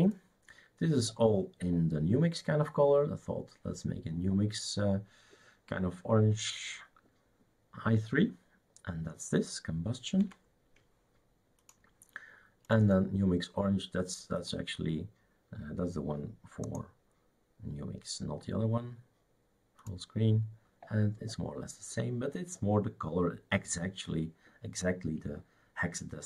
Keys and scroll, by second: 10.2 Escape.